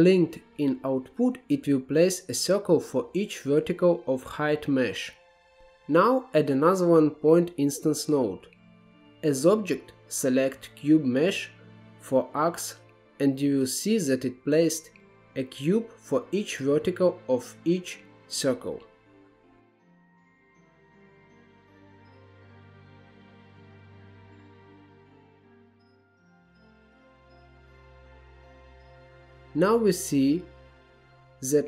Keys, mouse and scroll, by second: 1.5-1.9 scroll up 2, 2.2-2.6 scroll down 1, 2.6-4.0 middle drag, 4.0 click, 4.6 shift+a, 8.9 click, 11.1-11.7 scroll up 3, 11.7-12.3 scroll down 4, 12.3-13.9 middle drag, 13.9-14.5 scroll up 4, 14.5-15.4 shift+middle drag, 15.4-15.8 scroll down 1, 16.4-19.6 drag, 21.0 click, 22.0 Tab, 22.8 s, 24.7 scroll up 8, 24.9 scroll down 4, 25.1 shift+middle click, 25.4-25.9 scroll up 2, 25.6 shift+middle click, 25.9 s, 26.2 scroll down 10, 26.5 shift+middle click, 26.6 scroll up 9, 26.9-27.4 scroll down 2, 27.1 shift+middle click, 27.4-29.1 middle drag, 29.1 KP_7, 29.7-30.8 scroll up 5, 30.8-31.6 shift+middle drag.